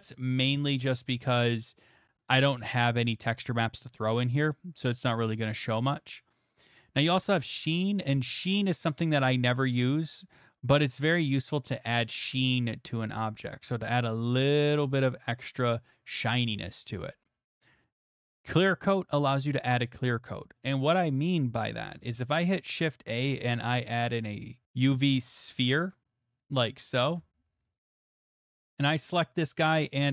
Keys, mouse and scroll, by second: 2.8 click, 3.6 click, 6.8 middle click, 10.5 middle click, 10.5 click, 11.7 click, 13.8 middle click, 14.6 middle click, 18.0 click, 19.8 middle click, 20.9 middle click, 21.4 shift+middle click, 21.4 middle click, 21.4 middle click, 21.8 middle click, 22.1 shift+a, 24.1 click, 24.6 x, 24.6 a, 24.7 click, 26.5 click, 26.8 g, 27.0 shift+a, 27.1 shift+z, 27.6 click, 27.9 middle click, 28.1 shift+middle click, 28.3 middle click, 29.7 middle click.